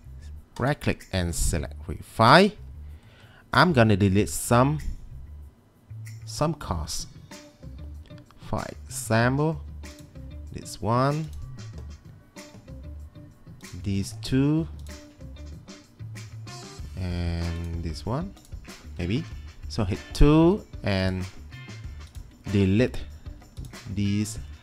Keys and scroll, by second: 19.2 2.